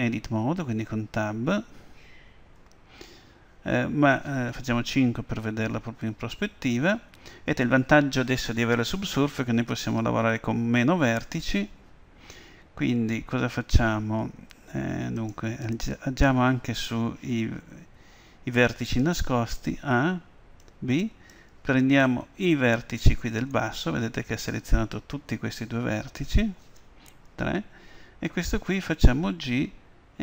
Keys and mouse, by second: 0.7 Tab, 4.9 KP_5, 15.2-17.1 drag, 19.6 a, 20.6 b, 23.5-27.3 middle drag, 27.3 KP_3, 29.4 g.